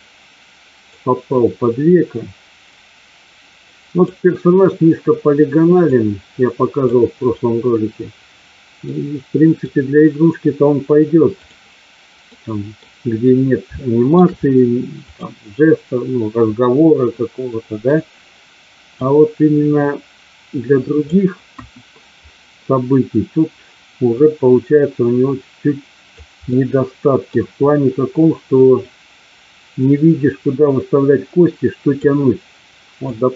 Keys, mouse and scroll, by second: 1.8-4.1 drag, 5.8-6.8 drag, 8.8-9.6 middle drag, 11.3 click, 12.3 middle click, 13.7 shift+middle click, 15.0 click, 17.8 click, 19.0-21.1 drag, 21.5 KP_1, 24.1-26.1 drag, 26.5 middle click, 28.7-32.0 drag, 33.1-33.3 drag.